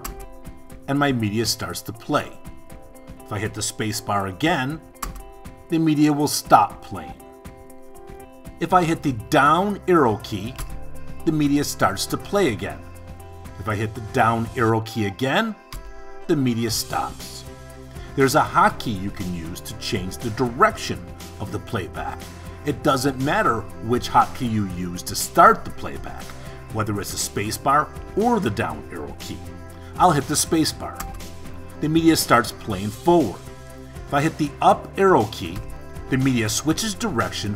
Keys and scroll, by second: 5.0 space, 8.9 Down, 14.4 Down, 30.5 space, 34.4 Up.